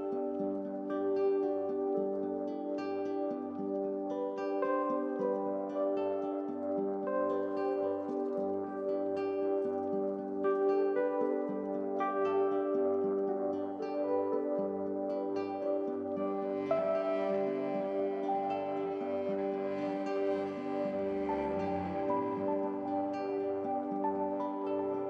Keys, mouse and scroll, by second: 0.0 s, 0.8 KP_3, 1.2-2.0 scroll up 2, 2.0 KP_1, 2.7 KP_7, 3.6 g, 6.3 middle click, 6.7-7.3 scroll up 2, 7.3 KP_1, 7.9 s, 9.1 s, 10.4 KP_1, 10.8-11.5 scroll down 1, 11.5 g, 14.3 r, 17.6 shift+click, 18.0 scroll down 1, 18.2 shift+middle click, 18.7 alt+x, 19.1 click, 19.6 middle click, 20.1 scroll up 1, 20.3 middle click, 20.8 KP_7, 21.4 click, 22.1 g, 23.5 click, 23.7-24.7 middle drag, 24.7 scroll down 1, 25.0 middle click.